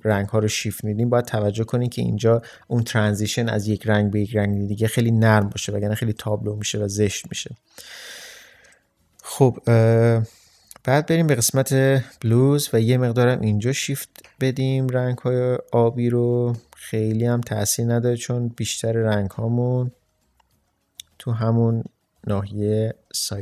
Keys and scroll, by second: 5.5 ctrl+space.